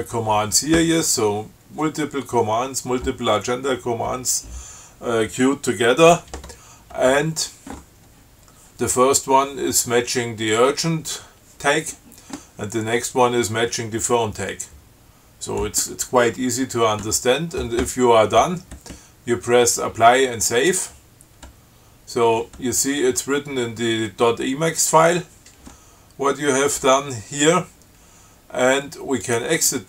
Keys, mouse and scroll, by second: 16.1-16.6 scroll up 2, 20.7 click, 29.5 click.